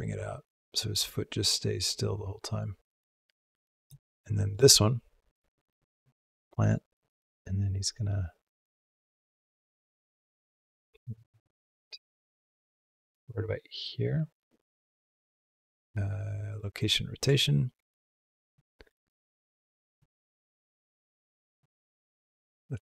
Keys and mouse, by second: 4.4 click, 5.1-14.5 drag, 15.6 k, 16.7 middle drag, 17.2 shift+middle drag, 17.4 shift+drag, 18.4-19.8 drag, 20.5 g, 21.5 r.